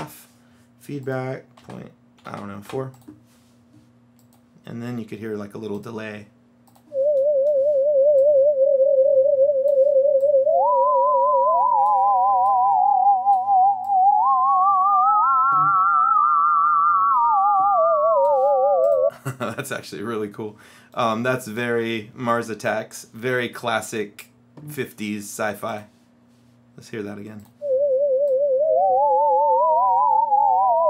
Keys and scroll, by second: 0.0 Return, 1.7 KP_Decimal, 2.3 KP_4.